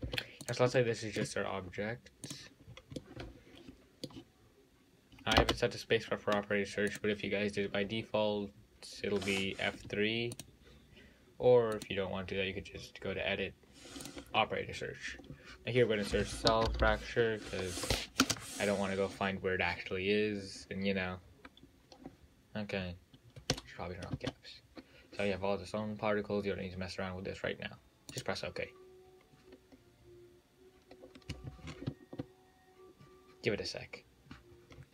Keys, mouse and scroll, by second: 1.0-2.5 middle drag, 2.5 click, 2.9-3.2 scroll down 4, 3.2-5.7 middle drag, 5.7 space, 10.0 F3, 12.0-15.0 drag, 17.0 l, 34.1-34.9 scroll up 8.